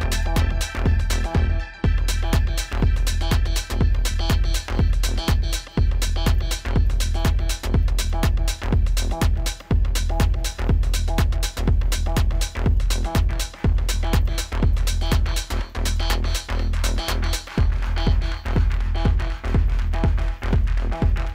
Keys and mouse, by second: 6.9 click, 13.7 click, 16.4 click.